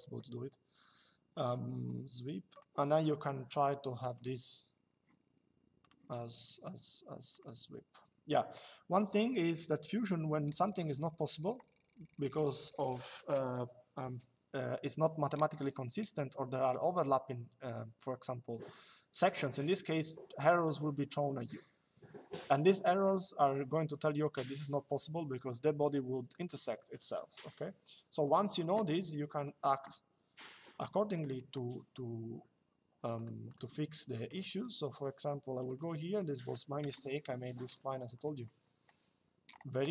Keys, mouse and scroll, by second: 2.3 click, 3.9 click, 5.5 click, 7.0 click, 27.9 click, 29.1 click, 30.9 click, 32.8 click, 35.3 click, 36.5 Delete, 37.8 click.